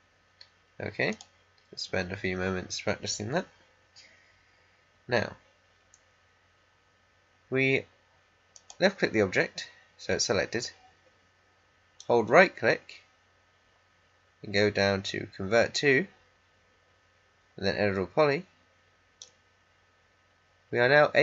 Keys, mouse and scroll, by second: 8.5 click, 11.9-21.2 right drag.